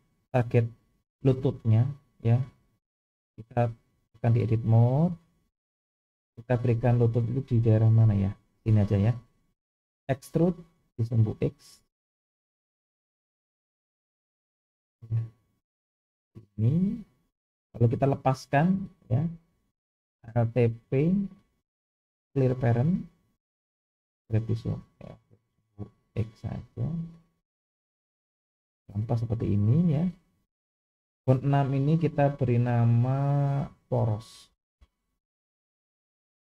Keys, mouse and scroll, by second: 3.2-4.0 drag, 5.0-6.0 scroll up 2, 8.6 click, 10.2 e, 17.8 click, 21.4 alt+p, 24.2 g, 32.7 click, 33.3-36.4 drag.